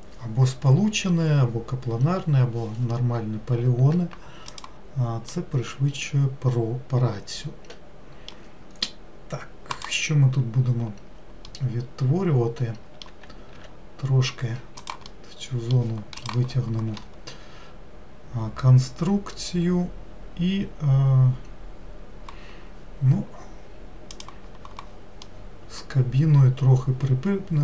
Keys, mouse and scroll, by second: 5.4-8.4 middle drag, 9.8 click, 11.5-13.6 middle drag, 13.6 e, 15.1-18.2 middle drag, 25.3-27.6 middle drag.